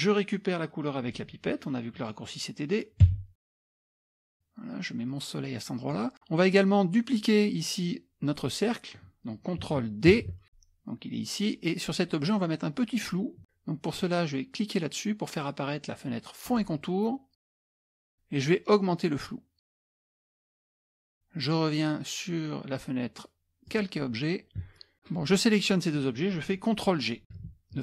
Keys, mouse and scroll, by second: 3.1 d, 3.4 click, 4.1 click, 5.3 click, 10.2 ctrl+d, 16.5 click, 17.7 click, 18.9-20.7 drag, 23.7 click, 24.7 click, 25.0 shift+click, 27.4 ctrl+g.